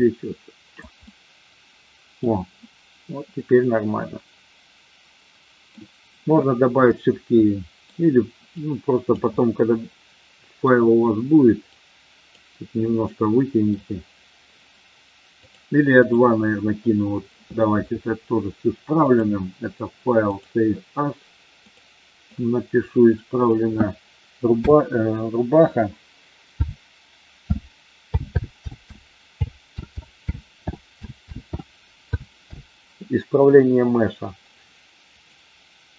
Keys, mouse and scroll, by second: 1.1-2.2 middle drag, 3.6-5.7 middle drag, 7.5 middle click, 8.7 click, 9.3-10.7 middle drag, 11.7 click, 12.8 middle click, 15.3 click, 19.2-20.6 drag.